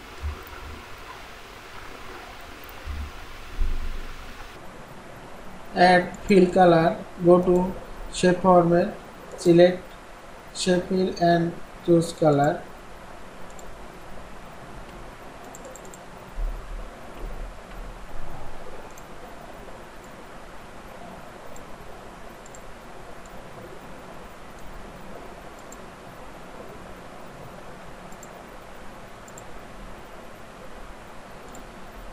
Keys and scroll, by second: 17.2 ctrl+shift+., 18.0 ctrl+shift+..